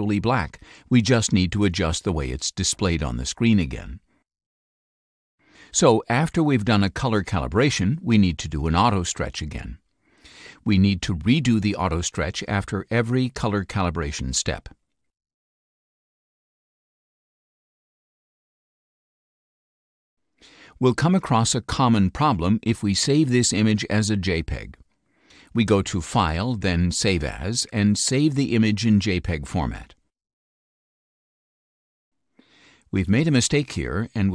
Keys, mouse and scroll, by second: 8.7 click, 26.3 click, 27.1 click, 28.5 click, 29.4 click, 30.6 click, 31.5 click, 32.0 click, 32.7 click.